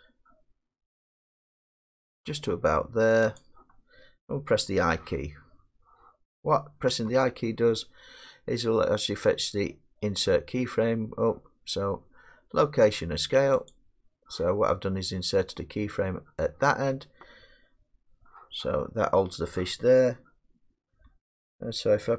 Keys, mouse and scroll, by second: 1.6 g, 3.4 click, 6.9 i, 8.4 click, 13.7-18.9 drag, 21.1-22.1 drag.